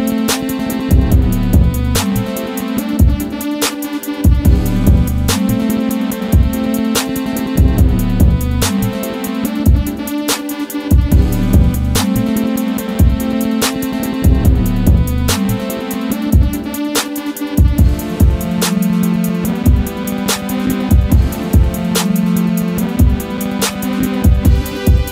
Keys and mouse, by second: 8.6 s, 8.8 x, 10.6 click, 11.2 s, 14.2 right click, 15.0 s, 15.7 click, 17.5 ctrl+a, 19.1 Tab, 20.1 right click, 23.0 click.